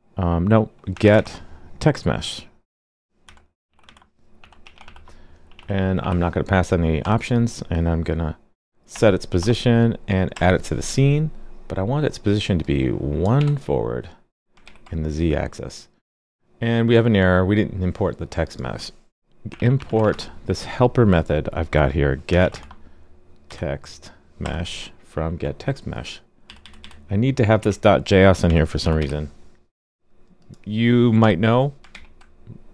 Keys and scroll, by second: 14.6 super+s, 31.9 super+s.